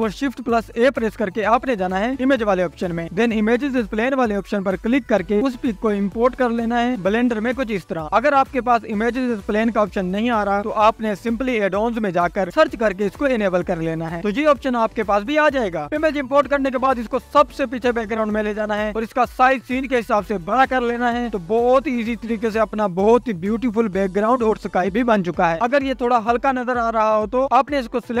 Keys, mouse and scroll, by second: 0.0-8.0 drag, 0.0-0.3 scroll up 1, 8.8 s, 10.2-10.7 scroll down 1, 10.7 click, 11.4 s, 12.7-13.1 scroll down 1, 13.1 click, 14.2 scroll up 2, 14.8 scroll up 2, 15.1-15.7 scroll down 5, 15.7 click, 16.3 click, 17.3 click, 18.1 click, 19.7 click, 20.1 s, 20.6-21.4 scroll up 3, 21.4-23.9 drag, 25.0 scroll down 1, 26.0 scroll down 2, 27.2-28.2 drag.